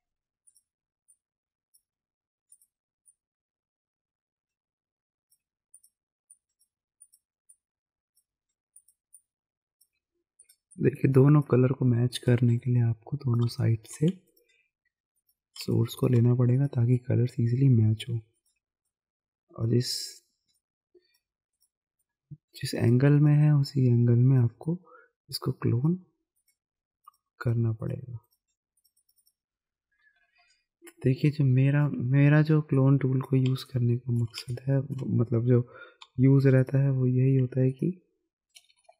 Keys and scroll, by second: 13.4 space, 14.1 alt+space, 16.4 alt+space, 30.2 ctrl+KP_0, 30.7 ctrl+KP_Subtract, 32.0 z, 33.5 space, 34.4 space, 36.0 alt+s, 38.8 ].